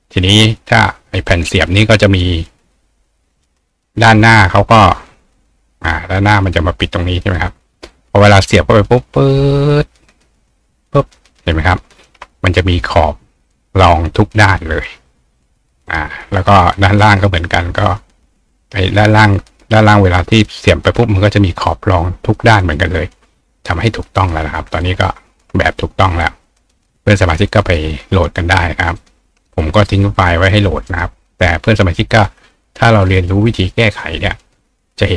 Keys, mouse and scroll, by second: 1.2 click, 1.8 click, 2.3 click, 3.1-6.2 drag, 7.9-11.4 ctrl+drag, 12.8 click, 13.5 click, 15.9 right click, 17.0 click, 18.5-20.2 ctrl+drag, 24.8-26.9 ctrl+drag, 27.9 click, 29.0 right click, 29.5 click, 30.4 click, 30.9 right click, 31.9 click.